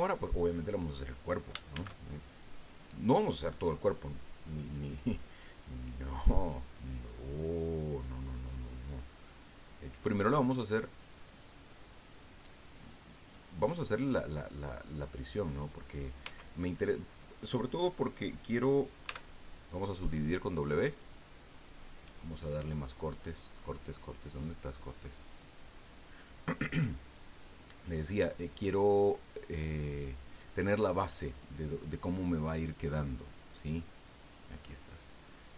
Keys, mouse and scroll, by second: 0.2 scroll up 2, 1.7 shift+a, 6.1 click, 7.4-7.8 scroll down 2, 8.6-13.3 drag, 13.4-15.3 middle drag, 15.5-16.1 middle drag, 16.2 Tab, 16.8 middle click, 19.0 w, 20.6 click, 22.9-23.6 scroll down 4, 24.2-24.8 scroll up 2, 25.0-25.5 scroll up 1, 26.1 scroll up 1, 34.2 click, 35.2 click.